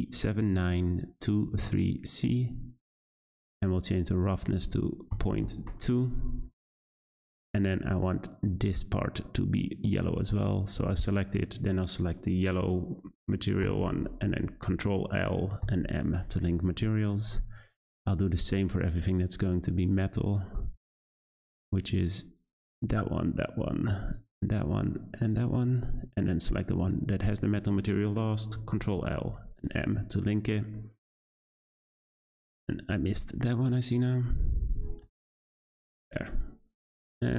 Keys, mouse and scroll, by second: 3.4-4.1 scroll down 1, 4.1-8.3 drag, 11.3 shift+click, 13.6 ctrl+l, 16.9 click, 18.2 click, 20.1 shift+click, 21.4-22.3 middle drag, 22.3 click, 23.1 shift+click, 24.0 shift+click, 25.2 shift+click, 26.6 shift+click, 28.7 ctrl+l, 30.3 click, 30.7-32.5 middle drag, 32.5 click, 33.6 shift+click, 34.7 ctrl+l, 36.1-37.2 drag.